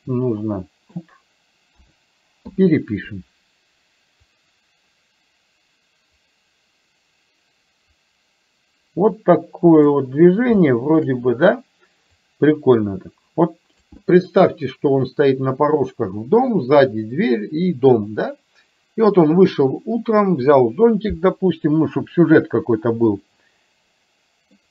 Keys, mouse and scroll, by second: 1.8 a, 2.5 i, 4.3-10.0 drag, 10.8 shift+middle click, 12.3-13.9 drag, 23.2-24.7 middle drag.